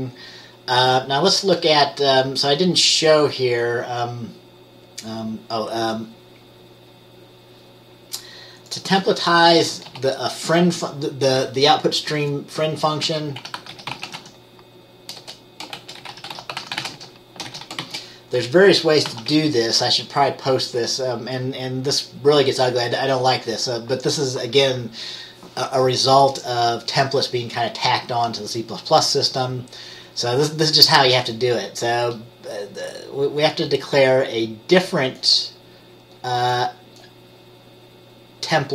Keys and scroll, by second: 10.0 ctrl+s, 13.2-14.3 typing, 15.3-17.9 typing, 19.2 ctrl+s.